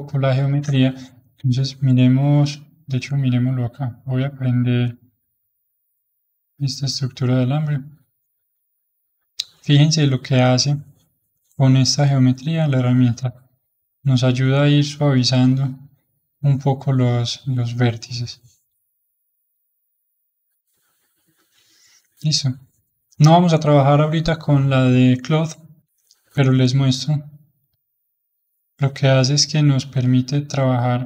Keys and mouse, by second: 0.9 Tab, 2.4 Tab, 3.9-7.1 drag, 8.3-10.6 drag, 10.6-12.7 middle drag, 12.7-25.9 drag, 25.9-27.6 middle drag, 27.6-30.7 drag.